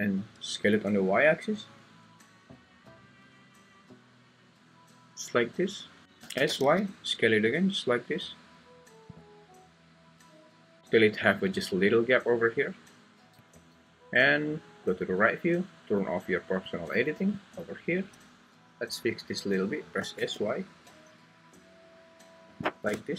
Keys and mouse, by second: 6.0 Escape, 6.2 s, 6.6 y, 9.1 click, 16.7 click, 20.0 s, 20.3 y.